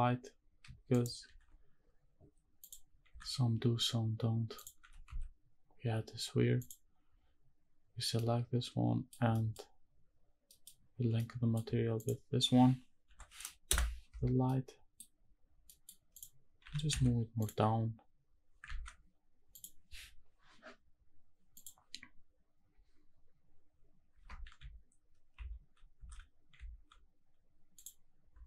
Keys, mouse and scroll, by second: 0.9 shift+right click, 1.2 shift+a, 3.1 s, 4.6 click, 4.8 g, 5.0 z, 6.6 click, 7.8-8.1 scroll down 1, 8.1-9.1 middle drag, 9.2 scroll down 1, 9.3 middle drag, 10.1-10.4 scroll down 1, 10.4 middle click, 10.6 scroll down 1, 11.2 middle click, 12.0 shift+click, 13.1 ctrl+l, 14.4-15.0 middle drag, 15.3-15.6 scroll up 2, 15.7 middle click, 16.1 click, 16.6 g, 16.9 z, 17.4 click, 18.7 ctrl+s, 19.9 click, 21.6 click.